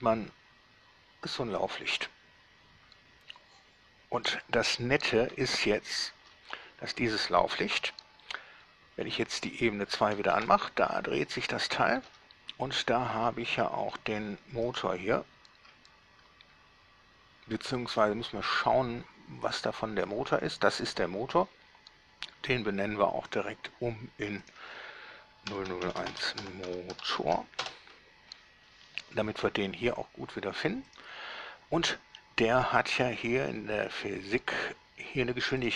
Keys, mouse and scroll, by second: 7.0 Escape, 9.7 shift+2, 10.6 alt+shift+a, 12.3 Escape, 13.5-14.3 drag, 14.9 right click, 19.7 click, 23.6 drag, 24.7 click, 25.7-27.4 typing, 27.8 Return, 31.1 click, 32.3 middle click, 34.1 click.